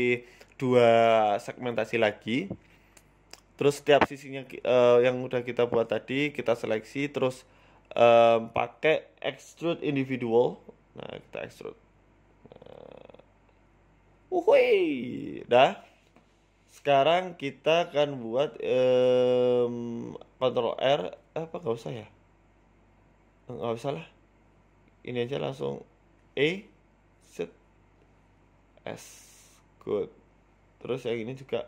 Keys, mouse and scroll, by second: 0.6 s, 4.3 click, 4.8 right click, 5.0 right click, 5.5 middle click, 6.2 shift+right click, 6.9 middle click, 8.0 shift+right click, 8.3 middle click, 10.4 click, 11.9 click, 14.2 click, 14.3 z, 14.9 z, 15.5 middle click, 15.7 Tab, 15.8 scroll down 3, 15.9 middle click, 17.6 KP_1, 18.1 middle click, 18.4 Tab, 18.7 middle click, 19.0-19.4 scroll up 2, 19.2 middle click, 19.8 middle click, 21.2 ctrl+r, 25.5 ctrl+z, 25.9 right click, 26.6 shift+right click, 27.0 KP_3, 27.7 KP_1, 28.4 e, 29.9 s, 31.2 shift+middle click, 31.5 middle click.